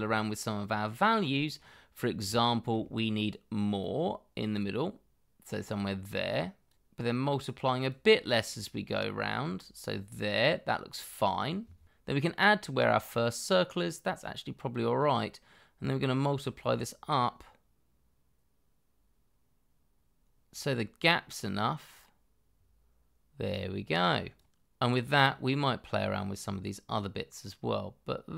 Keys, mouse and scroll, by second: 1.2-2.2 scroll up 1, 2.3 shift+middle click, 25.5 double click.